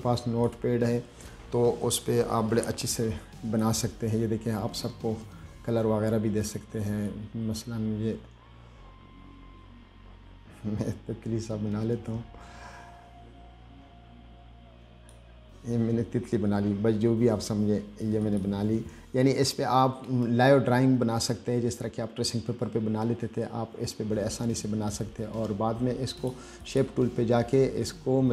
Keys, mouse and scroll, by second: 3.7 click, 5.6-6.0 scroll down 2, 6.3-6.6 scroll up 2, 7.3-15.4 drag, 18.5 click, 19.7-20.0 scroll down 2, 20.3-20.6 scroll up 2, 20.6 middle click, 21.8-22.1 scroll down 2, 23.2-23.5 scroll up 2, 24.5-24.8 scroll down 2, 26.5 click, 26.9 click, 28.0-28.3 scroll up 2.